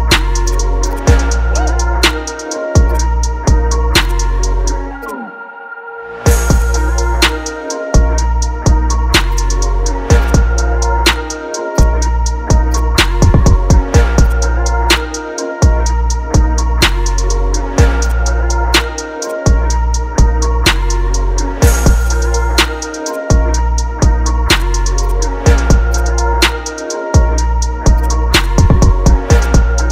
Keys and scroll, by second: 1.2 BackSpace, 1.6 shift+c, 2.0 Return, 2.2 ctrl+t, 6.9 Return, 8.5 ctrl+t, 11.1 ctrl+KP_Add, 23.7 ctrl+z.